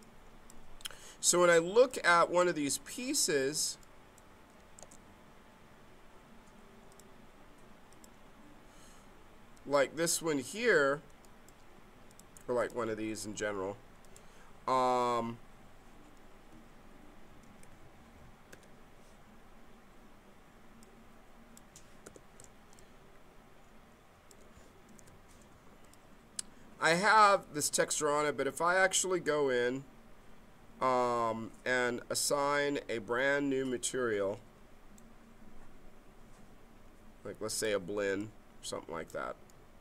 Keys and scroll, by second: 4.8 space, 17.3 ctrl+d, 18.5 w, 22.0 f, 24.9 6.